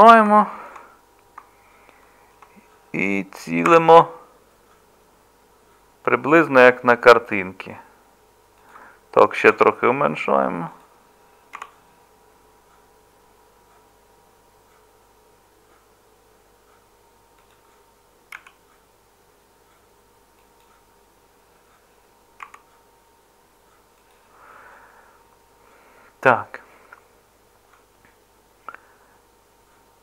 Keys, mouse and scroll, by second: 3.7 g, 9.5 s, 11.6 g, 18.4 s, 22.4 g.